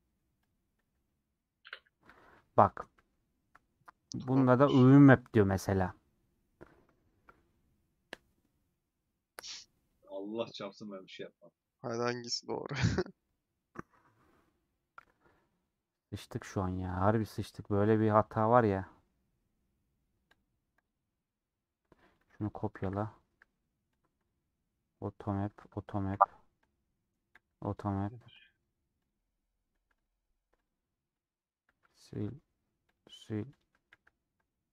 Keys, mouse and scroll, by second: 0.0 middle click, 0.4-3.1 drag, 3.1 ctrl+z, 24.0 click, 26.1 h, 28.5 click, 29.7 h, 29.9 click, 31.7 h, 33.0 click, 33.9 h.